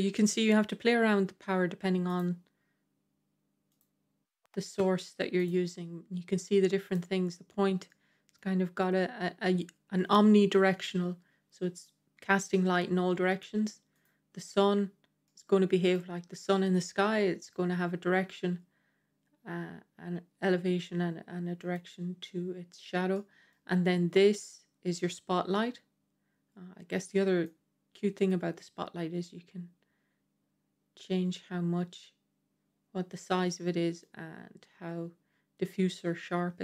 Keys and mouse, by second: 1.9 click, 3.6 click, 5.2 click, 7.7-8.2 middle drag, 15.1 middle click, 16.2-17.4 middle drag, 21.4 click, 23.0-23.4 middle drag, 27.5-33.4 drag, 34.0-36.6 drag.